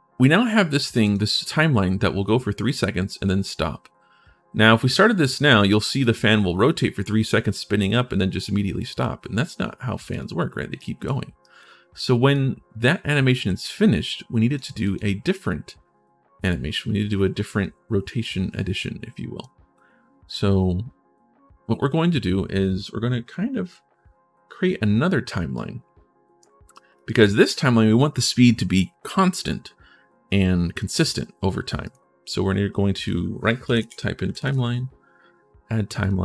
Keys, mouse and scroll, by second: 0.8 right click, 4.7 right click, 9.9 right click, 10.5 right click, 11.2 right click, 12.1-14.3 drag, 14.6 click, 18.9 right click, 25.3 right click, 26.5 right click, 26.9 right click, 31.6 right click, 32.7 click, 32.7 right click, 33.6 e, 34.3 e, 35.8 click.